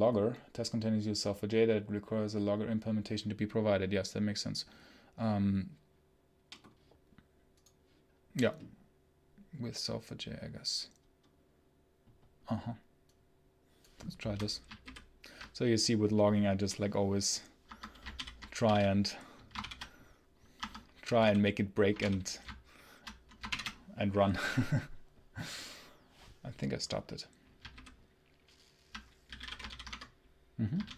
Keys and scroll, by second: 14.7 ctrl+super+h, 17.6 Escape, 18.0 ctrl+alt+l, 18.3-19.1 typing, 19.5 ctrl+shift+o, 20.4 Escape, 21.0 space, 21.2 h, 21.8 space, 21.9 l, 23.3 shift+F10, 30.7 ctrl+super+l.